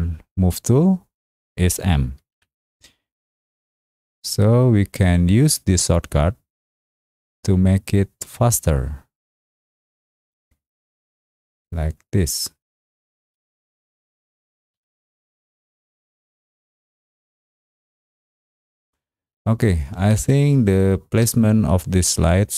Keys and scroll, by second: 2.3 m, 13.2 space, 14.7 m, 20.1 space.